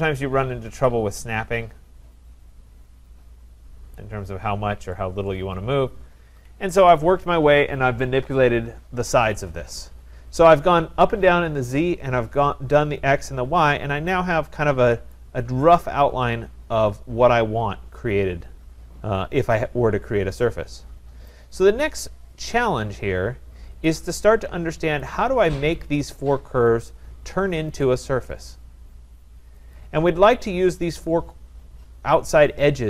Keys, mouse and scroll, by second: 2.8-4.0 scroll, 4.0 click, 4.6-5.9 scroll, 6.2 scroll, 6.2 Escape, 6.5 Escape, 10.0-10.4 scroll, 15.1 right click, 15.5 middle click, 15.5-16.0 scroll, 16.0-17.8 scroll, 17.8-18.8 scroll, 19.1-19.8 scroll, 21.3 right click, 21.8-22.4 scroll, 22.4 scroll, 23.7-24.3 scroll, 24.3-24.8 scroll, 25.0 click, 26.1 click, 26.8 click, 27.8 click, 29.7 click.